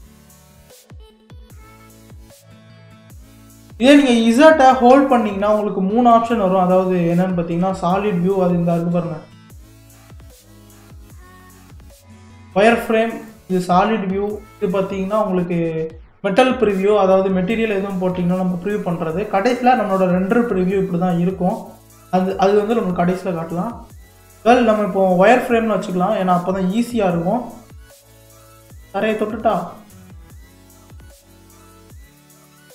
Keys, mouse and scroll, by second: 1.2-1.7 scroll up 4, 1.7 shift+middle click, 2.6 scroll up 2, 3.2-4.9 shift+middle drag, 4.9 z, 9.4-11.0 drag, 12.0 click, 13.2 click, 14.9 click, 19.5 click, 21.7 click, 24.3 z, 25.6-26.4 scroll up 3, 26.4-29.5 shift+middle drag, 31.6 s.